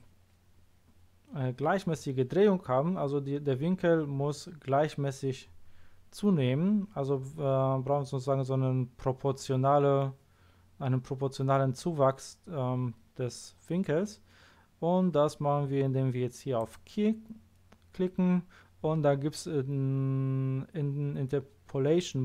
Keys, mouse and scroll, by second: 16.5 click.